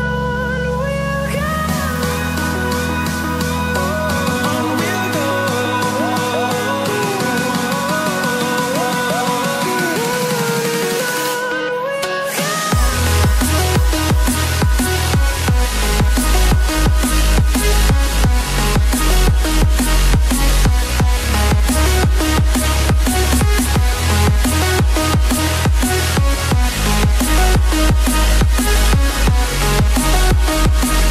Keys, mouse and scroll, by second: 0.8 click, 8.8-9.2 scroll up 1, 9.4 click, 9.6 double click, 10.5 click, 15.2-15.6 scroll down 1, 16.3 scroll down 1, 18.2 scroll down 1, 21.0 click, 22.1-27.5 typing, 29.2 click.